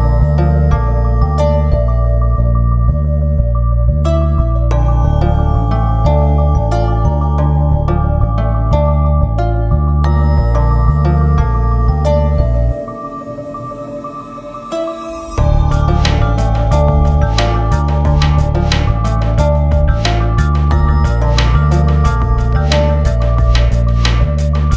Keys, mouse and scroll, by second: 2.9-5.3 drag, 5.3 ctrl+z, 5.5 click, 7.4 click, 8.5 scroll down 1, 9.5 scroll up 1, 11.3 click, 12.2 scroll down 1, 12.8 shift+click, 13.0 c, 13.2 shift+click, 13.4 a, 13.6 click, 15.9 click, 16.4 a, 16.6-20.7 drag, 20.7 Down, 22.0 click, 23.2 ctrl+x, 23.4 click, 24.2-24.7 drag.